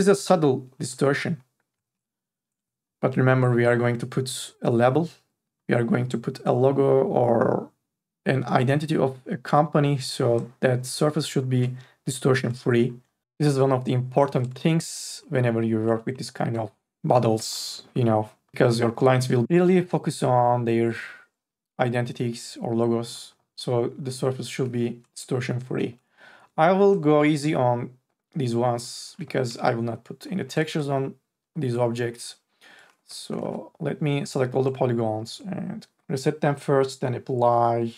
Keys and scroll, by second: 1.3 ctrl+z, 2.1 ctrl+z, 33.1 3, 33.7 ctrl+a.